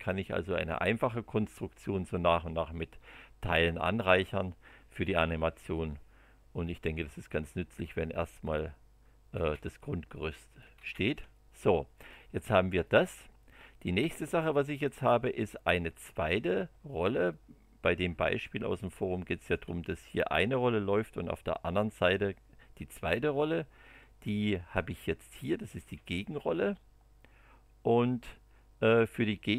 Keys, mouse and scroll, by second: 1.4-6.8 middle drag, 8.4 click, 9.3 space, 10.5 click, 10.7 space, 11.3 middle click, 12.8-14.2 middle drag, 17.3 middle click, 18.9 shift+click, 19.0 shift+scroll up 1, 25.3 click, 25.8 space.